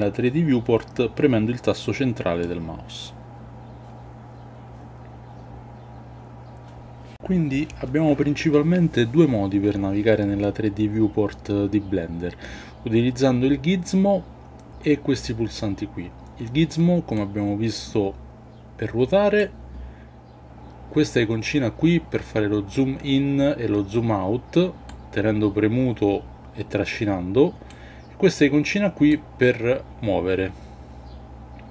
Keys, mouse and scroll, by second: 2.4-7.1 middle drag, 17.2-19.4 drag, 24.8-27.7 drag, 29.2-31.7 drag.